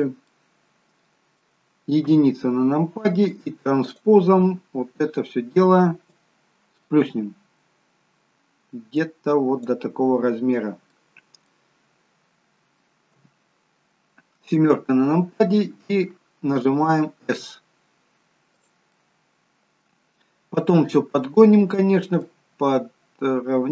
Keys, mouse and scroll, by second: 0.2 middle click, 2.1 KP_1, 3.8 click, 6.1 click, 10.9 middle click, 13.1 KP_7, 17.6 s, 19.0 middle click, 22.2 click.